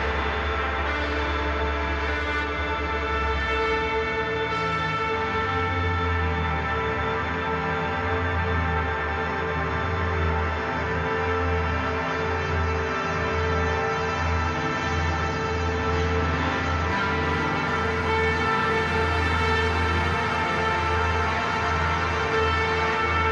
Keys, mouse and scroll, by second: 0.2 typing, 7.9-8.6 typing, 14.6 ctrl+y, 16.6 click, 17.8 click, 19.5 click, 23.0 Left.